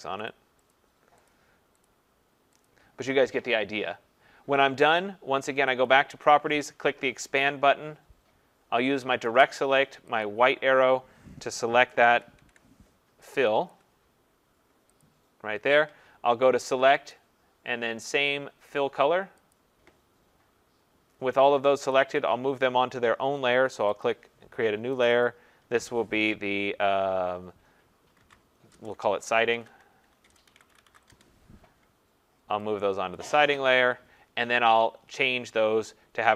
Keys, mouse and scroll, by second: 0.3 click, 0.7 click, 1.3 click, 1.9 click, 2.7 click, 5.9 click, 7.4 click, 9.3 click, 10.3 click, 11.8 ctrl+=, 12.0 ctrl+=, 12.4 ctrl+=, 13.7 click, 15.0 click, 17.1 click, 19.6 click, 21.9 click, 24.0 click, 25.1 click, 25.3 click, 27.9-31.4 typing, 32.9-33.7 typing, 33.2 click.